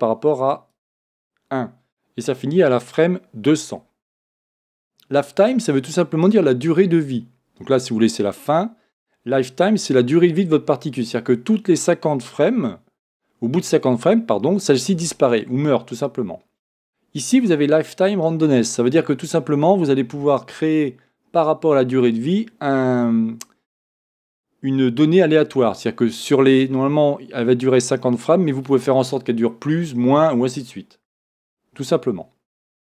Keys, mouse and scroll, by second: 0.9 click.